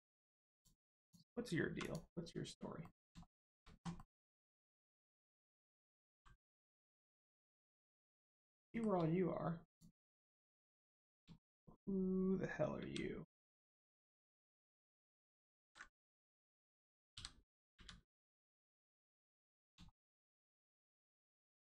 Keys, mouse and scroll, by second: 0.5 click, 0.5 middle click, 1.0 click, 2.8 middle click, 3.2 middle click, 3.9 middle click, 6.1 g, 6.5 right click, 7.1 click, 8.2 middle click, 8.7 shift+middle click, 9.6 click, 9.7 click, 10.3 middle click, 11.4 shift+middle click, 12.8 g, 13.9 click, 14.5 middle click, 15.6 ctrl+z, 15.9 middle click, 18.2 middle click, 19.0-19.4 scroll up 1, 19.4 middle click, 19.9 shift+middle click, 21.5 middle click, 21.5 middle click.